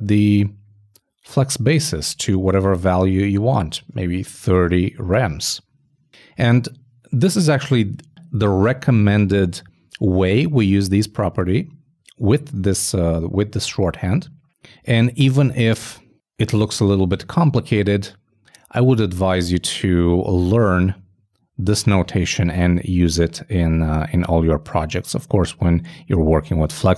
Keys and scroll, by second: 12.5 super+Left, 13.0 shift+super+Left, 13.8 alt+shift+Right, 20.8 alt+Right, 22.7 alt+super+Right, 23.1 alt+super+Right.